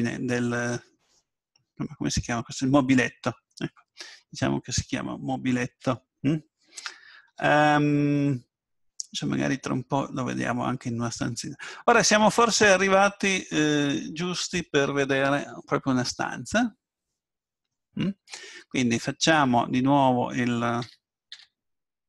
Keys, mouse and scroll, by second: 4.6 middle click, 4.6 scroll down 1, 7.2 Tab, 20.8 a, 21.4 a.